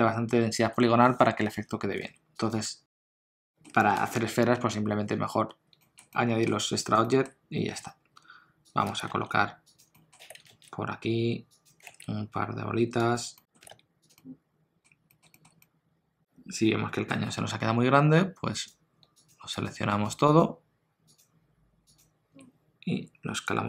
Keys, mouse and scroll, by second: 0.6 Tab, 2.0 alt+a, 2.4 click, 3.1 shift+middle click, 3.2 middle click, 3.5 shift+middle click, 6.1 middle click, 7.0 shift+middle click, 7.7 s, 9.1 g, 10.0 middle click, 10.2 g, 11.9 shift+d, 13.4 middle click, 13.6 g, 14.2 middle click, 15.1 middle click, 15.3 shift+middle click, 15.6 middle click, 18.5 click, 19.2 shift+click, 22.9 s.